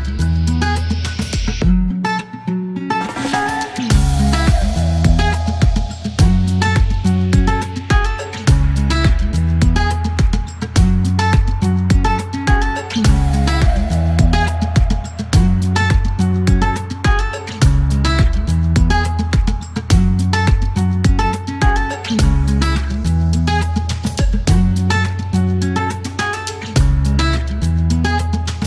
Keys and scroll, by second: 1.8 KP_1, 1.9 Return, 2.3 alt+e, 3.6 typing, 4.2 Delete, 6.2 typing, 8.5 typing, 13.7 e, 15.0 typing, 20.0-21.1 typing, 23.2 KP_Decimal, 23.3 KP_1, 23.4 Return, 23.8 e, 24.6 F1, 25.0 space, 27.7-28.4 typing.